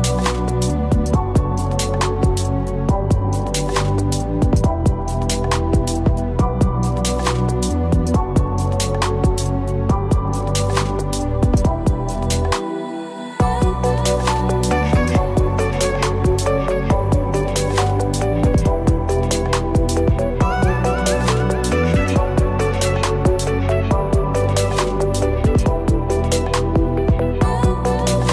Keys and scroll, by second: 5.9 ctrl+g, 16.7 ctrl+g.